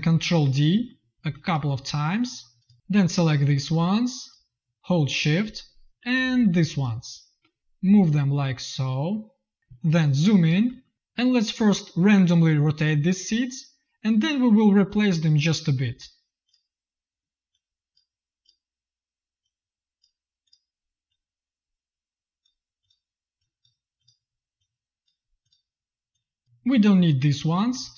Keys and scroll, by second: 0.0 ctrl+d, 2.7 ctrl+z, 9.6 z, 10.6 v, 25.3 space, 26.4 v.